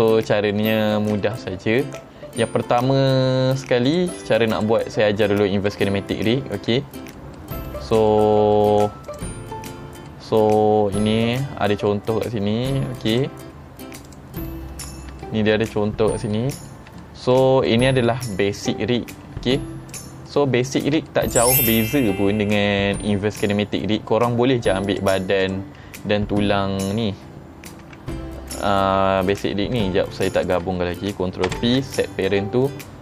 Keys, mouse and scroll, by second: 0.3 shift+middle drag, 1.3-1.7 shift+middle drag, 3.9 click, 4.6 click, 5.3-5.7 middle drag, 6.8 shift+middle click, 7.4 middle drag, 8.2-8.6 shift+middle drag, 9.1 click, 9.8 scroll down 2, 10.1-11.9 middle drag, 13.1 click, 13.6-14.1 scroll up 2, 14.1 click, 14.5-15.6 middle drag, 15.8 middle click, 15.8 scroll up 1, 16.4-16.7 middle drag, 17.1 shift+middle drag, 17.7-18.1 middle drag, 18.4 shift+middle drag, 19.1 middle click, 19.1 scroll down 3, 19.6-20.0 drag, 20.3-21.5 middle drag, 22.6-23.5 middle drag, 23.9-24.2 middle drag, 24.9 click, 25.5 click, 27.9 g, 28.6 right click, 29.4 click, 30.4 shift+click, 31.6 ctrl+p.